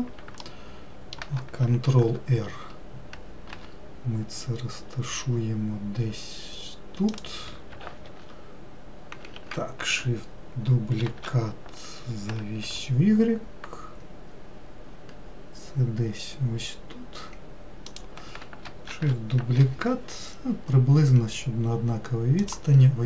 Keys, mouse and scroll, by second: 0.7-2.2 shift+middle drag, 2.2 shift+r, 3.8 g, 8.4 shift+r, 9.6 ctrl+z, 11.3 shift+d, 19.2 shift+d.